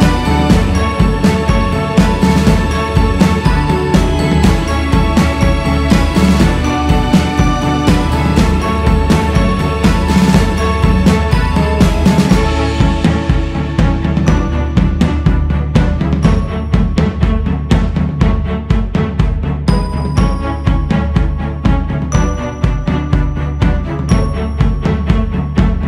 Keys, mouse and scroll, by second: 1.1-4.2 drag, 7.9-11.0 drag, 14.8-15.9 scroll down 3, 16.2 click, 17.0 scroll up 2, 17.3-21.3 drag, 21.3 ctrl+z, 22.4-25.5 drag.